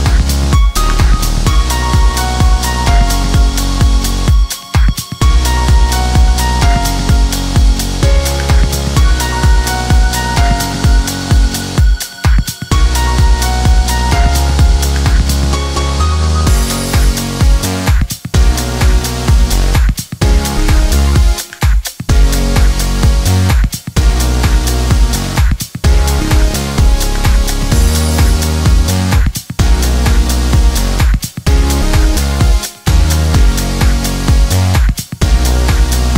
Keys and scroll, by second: 7.7 1, 28.7 ctrl+v, 33.5 ctrl+v.